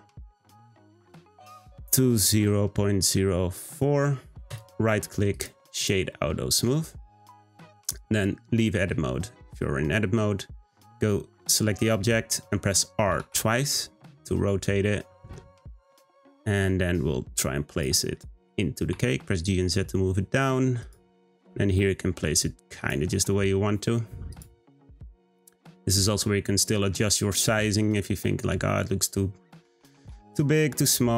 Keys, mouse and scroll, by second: 3.5 middle click, 4.5-5.8 right drag, 5.8 click, 6.1-7.0 middle drag, 7.0-7.5 scroll down 1, 7.5 click, 8.0-8.4 scroll down 1, 8.4-11.5 middle drag, 13.1 r, 18.4 g, 21.3 r, 23.1 r, 24.6-27.1 middle drag, 27.1-27.6 scroll down 3, 27.6-29.5 middle drag, 29.5 Tab, 29.8 a, 30.1 s.